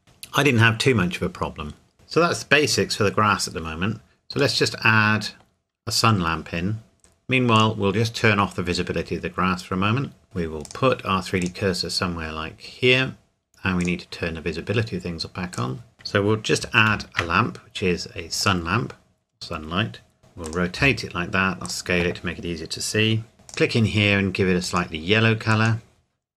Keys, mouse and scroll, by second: 1.9-2.6 scroll up 1, 4.7 middle click, 7.5 click, 8.4 scroll down 1, 8.5 scroll up 1, 8.8-9.1 scroll down 1, 9.7-10.2 scroll up 1, 10.6 click, 13.8 click, 15.9 Delete, 16.9 shift+a, 18.4 click, 20.2 r, 20.4 click, 20.8 s, 21.6 click, 23.5 click.